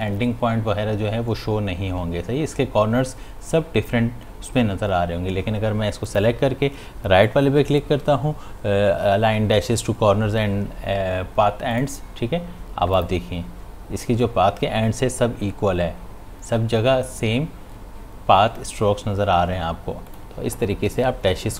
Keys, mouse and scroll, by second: 6.1 click, 11.7 click, 20.1 click.